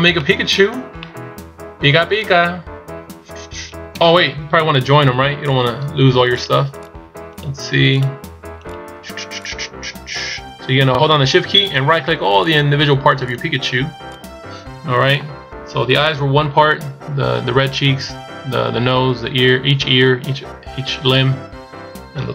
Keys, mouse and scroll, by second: 3.6 KP_1, 5.3 right click, 6.1 shift+right click.